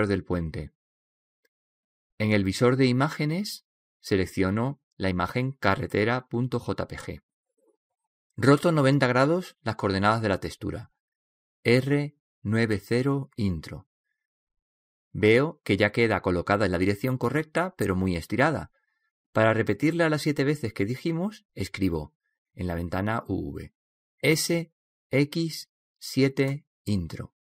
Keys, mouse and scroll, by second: 0.4-2.1 drag, 0.4 right click, 2.1-7.4 middle drag, 7.4-13.8 drag, 15.9-18.9 middle drag.